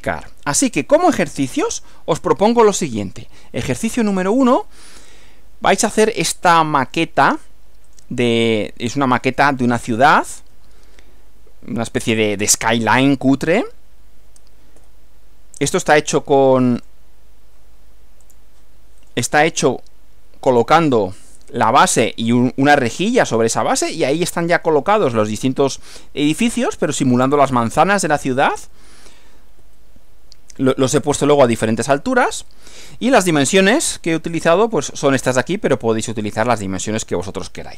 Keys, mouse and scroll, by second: 1.7 click, 5.0-7.1 middle drag, 7.9 click, 14.7 Right, 16.8 click, 18.3 click, 19.0 click, 19.7 Right, 29.6 Left, 32.1 Right, 32.8 Right.